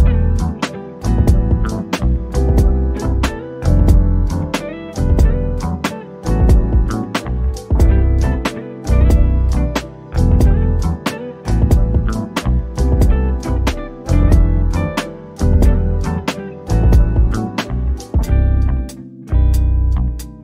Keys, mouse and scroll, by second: 0.0-0.4 scroll up 1, 0.9 shift+click, 2.9 middle click, 3.5-4.5 scroll up 1, 4.5 click, 6.9 click, 10.8 1, 11.4 Return, 12.5 click, 13.2-14.0 scroll down 1, 14.3 shift+click, 15.6 click, 16.9 typing, 17.7 Return, 19.6 shift+click.